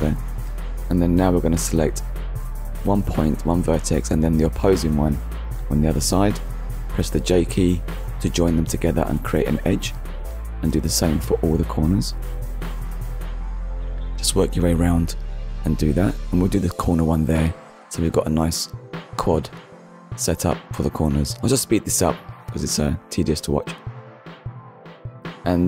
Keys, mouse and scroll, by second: 0.2 shift+middle click, 1.6 j, 3.1-3.4 scroll down 2, 3.5 shift+middle click, 4.1 shift+middle click, 5.3-5.7 scroll up 1, 6.0 click, 6.9 click, 7.9 shift+click, 8.8 j, 9.6 click, 10.2 shift+middle click, 12.7 shift+click, 13.9 j, 14.7 click, 15.3 shift+click, 16.5 j, 17.3 shift+middle click, 18.6 click, 19.2 shift+middle click, 20.7 shift+click, 21.3 j, 21.6 click, 21.8 shift+click, 22.1 j, 22.2 click, 22.3 middle click, 22.5 shift+middle click, 22.9-23.4 scroll up 2, 23.0 click, 23.2 shift+click, 23.5 j, 23.7 click, 23.8 scroll down 2, 24.1 shift+middle click, 24.7 KP_1.